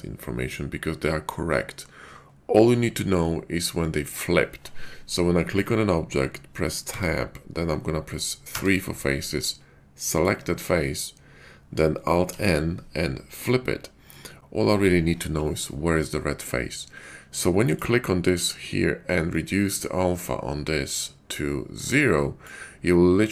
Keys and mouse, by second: 6.9 Tab, 8.4 3, 12.3 alt+n.